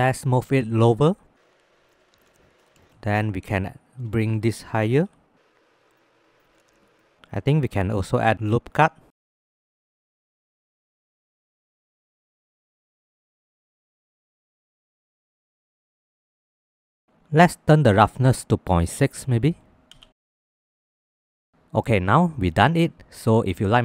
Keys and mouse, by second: 0.7 z, 2.2 Tab, 2.4 middle click, 4.3 shift+middle click, 5.1 z, 6.4 click, 6.8 shift+middle click, 7.6 ctrl+r, 14.5 click, 17.1 ctrl+z, 18.2-19.7 drag, 20.1 ctrl+s, 21.0 click.